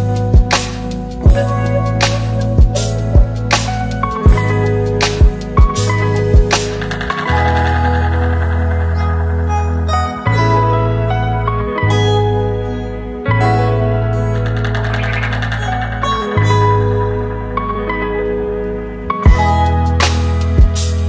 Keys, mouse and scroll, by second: 1.1 ctrl+c, 2.7 click, 7.5 ctrl+v, 9.3-11.8 click, 15.4 click, 17.5 click.